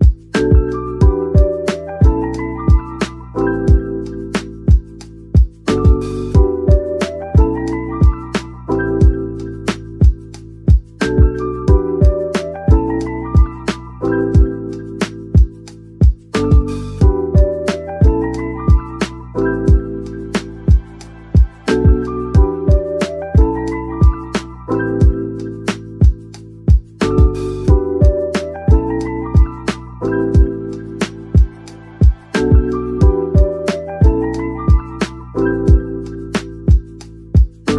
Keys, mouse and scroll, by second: 0.5 middle click, 1.9-4.7 typing, 3.2 double click, 7.5 typing, 8.9-9.5 typing, 9.0 Tab, 10.8-11.4 typing, 12.5 double click, 13.0 Tab, 13.6 Tab, 14.8-15.3 typing, 16.2 Tab, 16.5 middle click, 17.4 middle click, 18.2 scroll down 1, 18.4 middle click, 19.6 Tab, 20.4-20.7 typing, 21.5 Tab, 21.9-23.6 typing, 22.4 scroll down 1, 26.2 shift+right click, 26.7 typing, 28.0 middle click, 28.8-29.9 typing, 31.1 typing, 32.4 middle click, 33.1-35.9 typing, 37.1-37.7 typing.